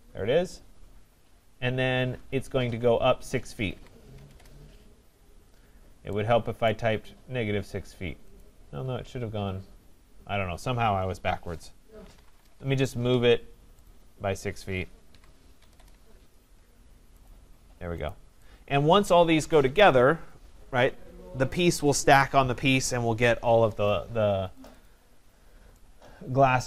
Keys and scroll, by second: 4.2 Return, 12.4 Return.